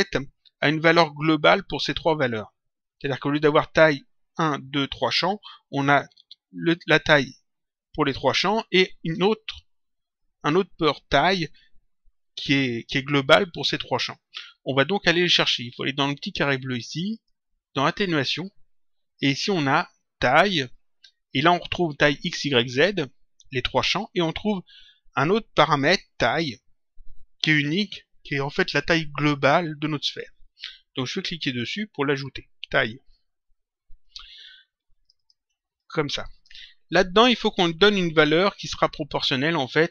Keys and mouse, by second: 17.1 click, 31.5 click, 35.0 click.